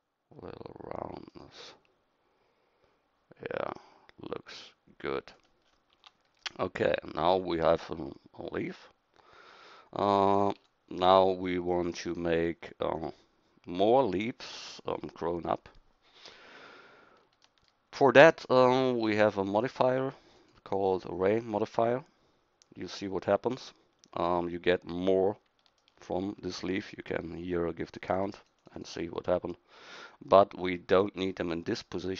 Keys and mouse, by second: 6.0 Tab, 10.6 KP_1, 20.4-22.5 drag, 25.8-28.1 middle drag, 28.1-32.1 drag.